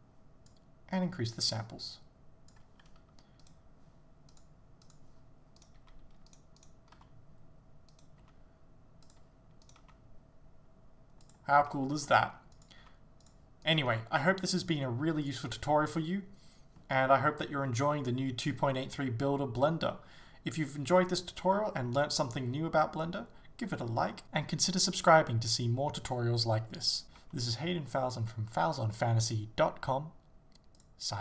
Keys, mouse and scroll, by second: 3.4 right click, 5.0 click, 5.6 right click, 5.8 g, 6.6 right click, 7.0 r, 8.0 right click, 8.2 g, 9.2 click, 9.7 right click, 9.8 g, 11.4 click, 11.7 right click, 12.0 r, 12.7 click, 12.8 g, 13.3 click, 13.7 right click, 13.9 g, 14.6 click, 27.2 g, 30.8 click.